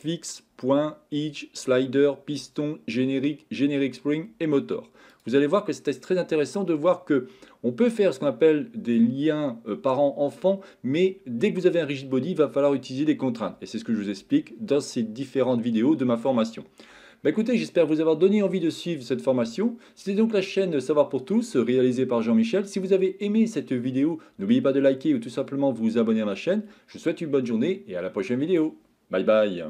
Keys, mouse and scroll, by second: 5.1 click, 14.4-15.3 middle drag, 16.3 shift+middle click.